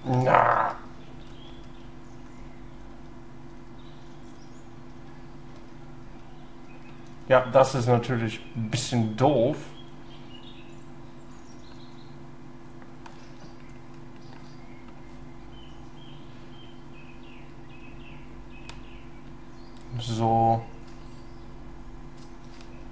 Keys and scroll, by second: 0.7 ctrl+z, 1.2 ctrl+y, 22.6 ctrl+z.